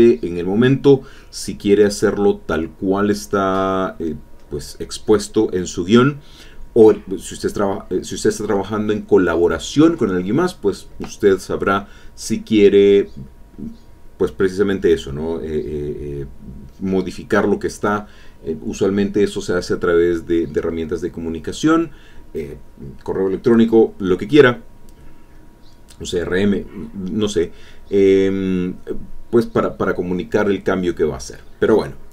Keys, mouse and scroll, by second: 2.3 click, 3.1 click, 3.6 click, 5.4 click, 6.1 click, 6.7 click, 7.2 click, 7.6 alt+Tab, 8.5 alt+Tab, 10.2 click, 12.2 click, 13.6-15.8 drag, 17.1-18.9 shift+drag, 19.7-21.3 shift+drag, 22.4 alt+Tab, 26.2 alt+Tab, 27.9 click, 28.5 alt+Tab, 29.9 alt+Tab, 31.1 alt+Tab.